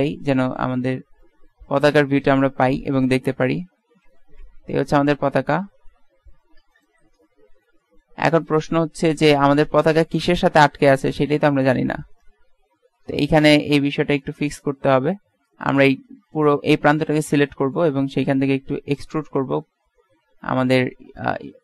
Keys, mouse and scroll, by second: 7.9 middle click, 10.0-11.4 right drag, 11.4-12.4 middle drag, 12.4 Tab, 13.2 a, 13.4 a, 14.3-15.7 middle drag, 15.7 right click, 16.6 right click, 18.9 e.